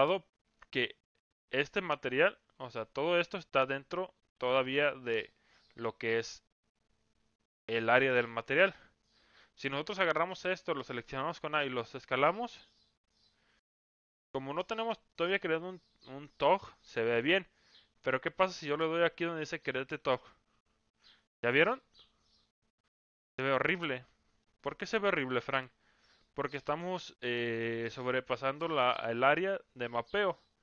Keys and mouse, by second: 0.8 Tab, 2.7 a, 9.9 a, 11.5 s, 13.4 Tab, 14.1-14.7 middle drag, 15.1-15.5 middle drag, 15.7-16.3 middle drag, 19.9 click, 21.7-22.9 middle drag, 23.5 middle click, 24.4 shift+middle drag, 25.1-25.5 middle drag, 26.1 Tab.